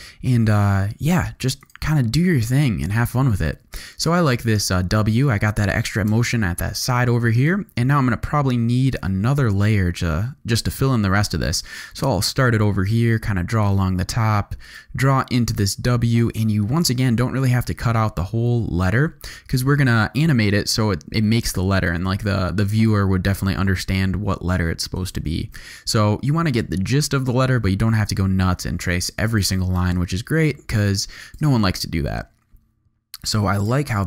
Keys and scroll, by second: 1.3 v, 3.1 z, 3.8 space, 6.1 space, 8.9 g, 28.9 v, 29.8 space, 33.2 z.